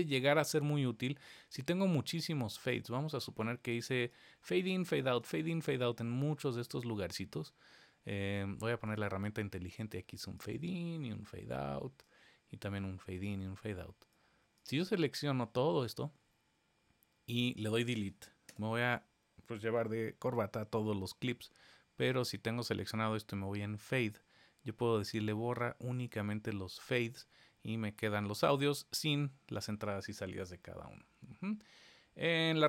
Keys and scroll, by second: 20.2 super+z.